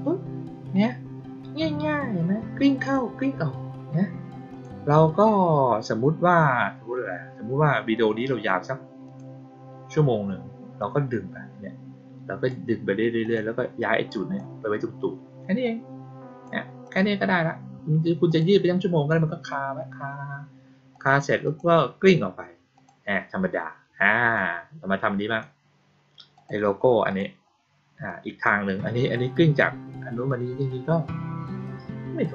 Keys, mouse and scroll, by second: 2.7 click, 4.4 click, 9.0 click, 10.7-12.4 drag, 13.1 click, 13.7-14.3 drag, 15.6 click, 16.8 click, 18.2 click, 20.8 click, 21.4 click, 22.7 click, 24.3-25.3 drag, 26.3 click, 27.0 click, 28.0-28.4 drag.